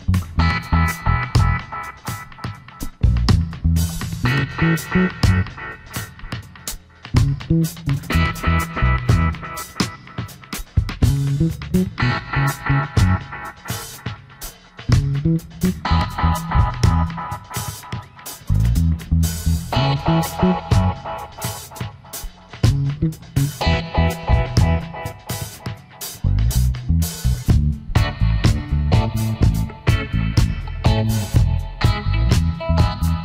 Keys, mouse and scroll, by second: 5.2 space, 8.6 space, 10.8 space, 27.4 alt+scroll down 1, 27.6 space, 28.2 alt+scroll up 1, 28.6 space, 29.8 space, 32.7 ctrl+a, 33.0 Caps_Lock.